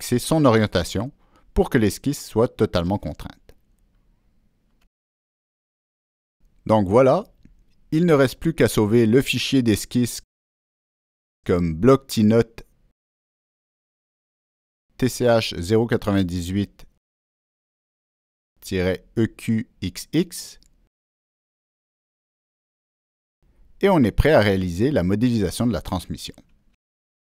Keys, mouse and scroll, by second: 0.0 Escape, 0.0 click, 1.1-1.8 drag, 3.0 click, 3.9 click, 4.4 click, 5.8 click, 7.2 click, 9.3 click, 10.8 click, 13.7 ctrl+v, 18.0 click, 19.1 click.